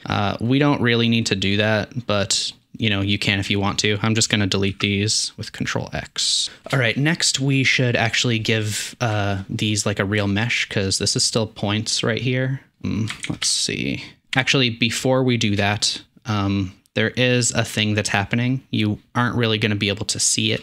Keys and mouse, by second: 0.0 Tab, 0.0 ctrl+space, 2.7-3.2 drag, 4.3-4.9 ctrl+drag, 4.7 ctrl+x, 8.8 middle click, 9.1 shift+middle drag, 10.2 shift+drag, 13.1 shift+middle click, 13.3 shift+a.